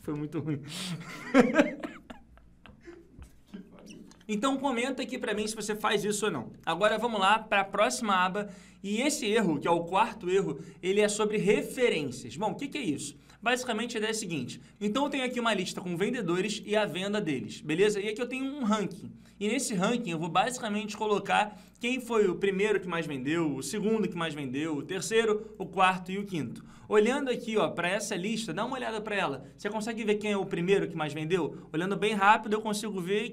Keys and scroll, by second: 7.0 ctrl+Page_Down.